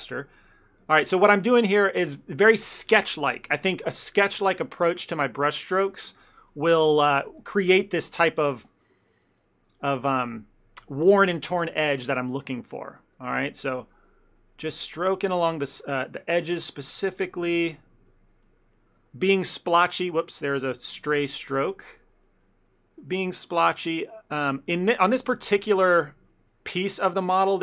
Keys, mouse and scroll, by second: 0.3 click, 0.5 click, 0.8 click, 1.1 click, 1.2 shift+middle click, 1.5 ctrl+middle click, 1.9 click, 2.1 click, 2.5 click, 6.0 ctrl+middle click, 6.6 click, 6.8-7.9 click, 7.9 middle click, 8.6 click, 8.8 click, 10.6 click, 12.4 middle click, 12.9 click, 13.1 click, 13.4-14.7 click, 15.3 middle click, 15.3 click, 15.6 shift+middle click, 16.0 ctrl+middle click, 16.4 click, 16.5 click, 17.1 middle click, 17.9 click, 18.2 click, 18.6 click, 18.8 middle click, 19.3 click, 20.1 ctrl+z, 20.3 ctrl+z, 21.1 ctrl+z, 21.8 click, 22.0-23.8 click, 23.9 shift+middle click, 24.1 middle click, 24.6 click, 24.9 click, 25.2 f, 25.4 ctrl+middle click, 25.6 middle click, 26.1 click, 26.4 click, 26.9 click, 27.2 click, 27.5 middle click.